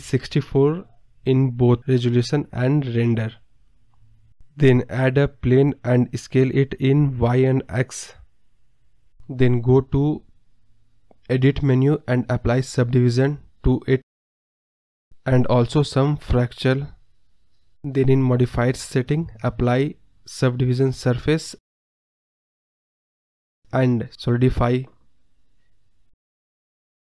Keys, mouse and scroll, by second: 1.0 scroll up 2, 1.1 middle drag, 1.4 scroll down 3, 1.6 middle click, 2.2 KP_0, 2.7 KP_0, 3.0 scroll up 1, 3.3-4.3 middle drag, 4.3 shift+a, 6.9 scroll down 1, 7.0 scroll up 4, 7.5-8.7 drag, 11.1-12.4 drag, 12.8-13.8 scroll down 1, 13.8 click, 14.0 Tab, 14.3 click, 14.5-15.6 right drag, 15.6-18.7 drag, 19.4 Tab, 19.8-21.4 right drag, 23.1 click, 23.3-23.8 scroll up 3, 23.8-24.8 drag.